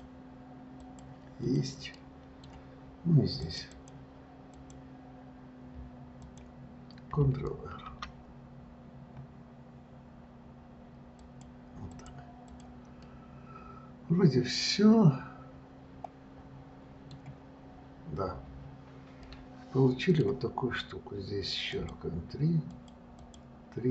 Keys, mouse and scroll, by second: 1.7 click, 2.2-3.7 middle drag, 3.7 click, 4.0 click, 4.8 click, 6.5 click, 12.7 click, 13.3-16.3 middle drag, 17.9-18.6 scroll down 4, 18.6-19.5 scroll down 1, 19.5-22.0 middle drag, 22.0 click, 23.0-23.9 drag.